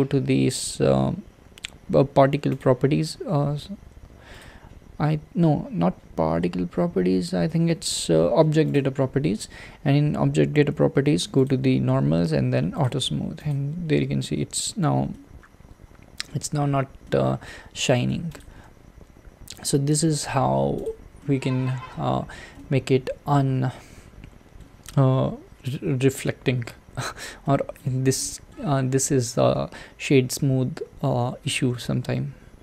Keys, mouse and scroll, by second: 12.7 click, 13.5 click, 13.9-16.5 middle drag, 16.5 scroll down 2, 17.0-18.4 middle drag, 18.4 click, 18.9 Tab, 20.1 Tab, 20.8 click, 21.2-22.0 middle drag, 22.0-22.5 scroll down 3, 22.5-25.8 middle drag, 25.8-26.6 scroll up 1, 26.6-27.2 scroll up 1, 27.4-32.4 shift+middle drag, 32.4 scroll up 1.